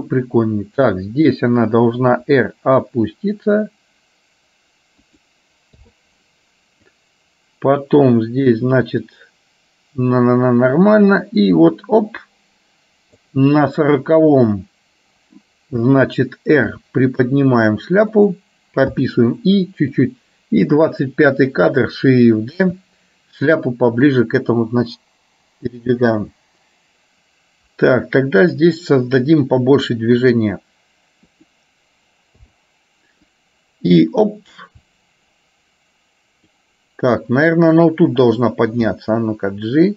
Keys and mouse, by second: 2.2 r, 7.1-13.5 drag, 16.9 r, 19.1 i, 20.1 click, 22.7 shift+d, 25.1-28.7 drag, 30.4 r, 32.6 i, 33.5-36.7 drag, 37.1 click, 39.0 g.